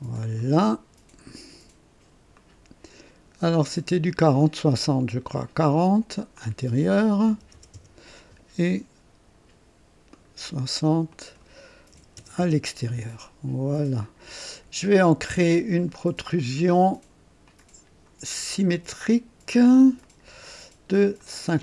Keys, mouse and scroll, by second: 0.4 click, 2.3 click, 3.8 click, 4.3 right click, 5.3 click, 6.4 click, 7.3 KP_4, 7.5 KP_0, 7.9 Return, 10.1 click, 11.1 click, 11.9-12.6 typing, 12.6 KP_Enter, 14.0 click, 14.8 click, 16.4 click, 17.4 click, 20.0 click, 21.2 click.